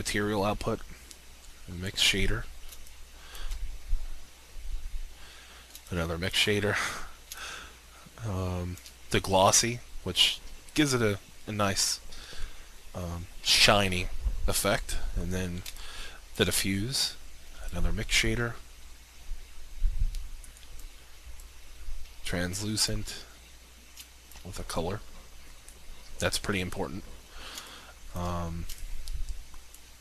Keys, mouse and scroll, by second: 2.7 alt+shift+click, 5.7 alt+shift+click, 14.2 alt+shift+click, 15.6 alt+shift+click, 17.5 alt+shift+click, 24.2 alt+shift+click, 27.5 alt+shift+click.